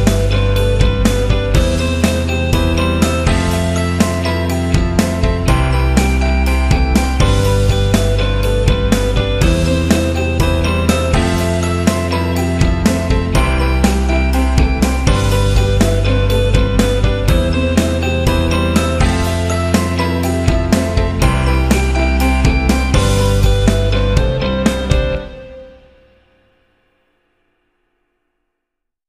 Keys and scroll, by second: 1.1 v, 5.1 z, 8.7 z, 10.8 v, 12.7 z, 13.7-15.2 typing, 17.5 ctrl+alt+z, 17.9 ctrl+alt+z, 22.1 z, 28.9 z.